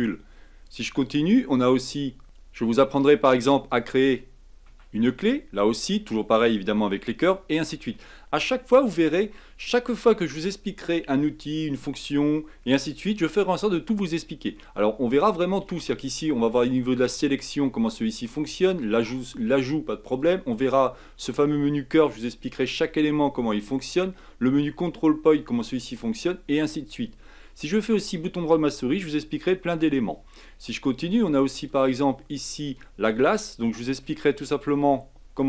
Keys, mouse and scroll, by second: 1.0 click, 2.2-3.7 scroll down 1, 3.7 click, 4.7 Tab, 5.0-6.1 middle drag, 6.1-6.5 scroll down 1, 6.5-9.6 middle drag, 15.8-20.2 drag, 20.6 click, 27.8-30.9 right drag, 31.0 click, 31.5-33.4 drag, 33.4-35.4 middle drag.